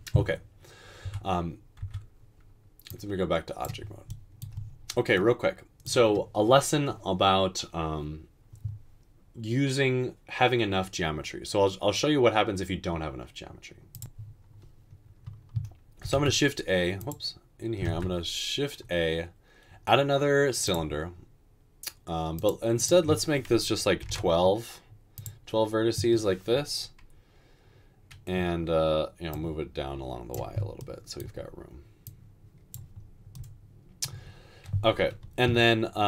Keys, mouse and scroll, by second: 1.1 Tab, 1.8 Tab, 16.2 typing, 17.9 typing, 24.3 typing.